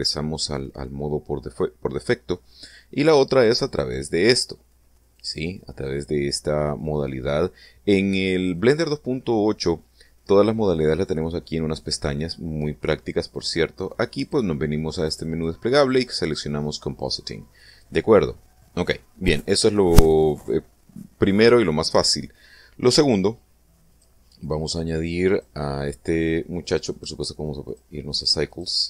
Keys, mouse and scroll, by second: 4.1 click, 5.6 click, 13.8 click, 14.6 click, 15.8 click, 17.4 click, 24.4 click, 25.8 click, 27.4 click, 28.1 click.